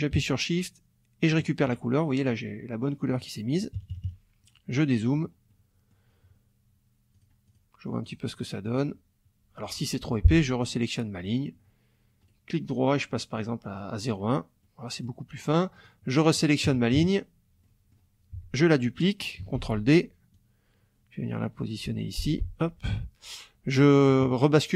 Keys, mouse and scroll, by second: 1.3 shift+click, 3.6 KP_Subtract, 4.7 click, 4.8 middle click, 5.5 middle click, 7.1 click, 8.0 click, 8.6 click, 10.0 F2, 10.6 click, 12.2 right click, 13.6 click, 14.0 click, 14.6 middle click, 15.7 click, 16.1 middle click, 16.6 KP_Subtract, 17.0 KP_Add, 17.6 click, 18.3 F1, 19.5 ctrl+d, 20.3-22.2 drag, 22.2 F2.